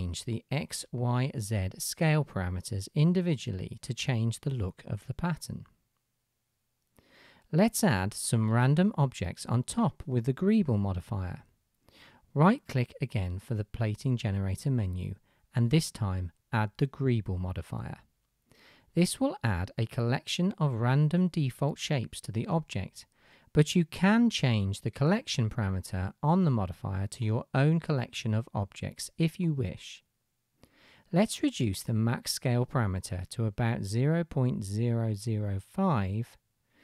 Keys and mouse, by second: 21.7-22.1 drag, 21.7-22.1 middle drag, 21.7-22.1 right drag, 22.7-24.9 drag, 22.7-24.9 middle drag, 22.7-24.9 right drag.